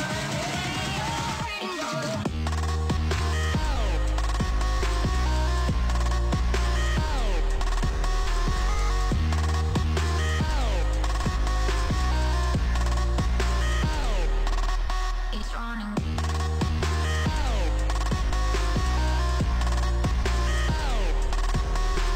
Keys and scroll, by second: 2.8 ctrl+s, 9.2 alt+[, 9.9 ctrl+s, 10.9 space, 20.5 space.